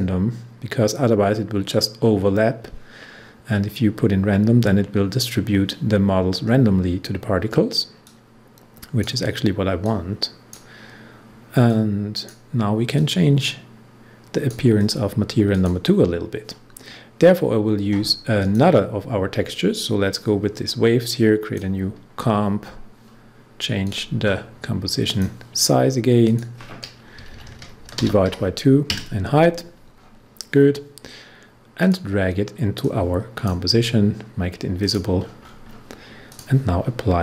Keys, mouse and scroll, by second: 8.0-14.7 drag, 15.7 click, 18.3-22.6 drag, 22.6 scroll down 1, 23.8 click, 27.1 Right, 27.9 shift+/, 28.2 2, 29.9 scroll down 1, 31.8-34.8 drag, 35.1 scroll up 1, 36.3 click.